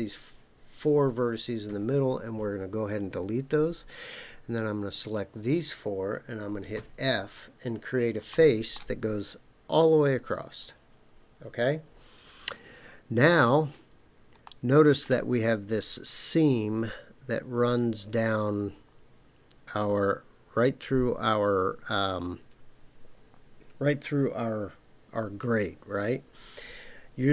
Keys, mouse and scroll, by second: 1.7 Delete, 3.9-4.9 drag, 6.7 f, 8.3 middle click, 14.4 middle click.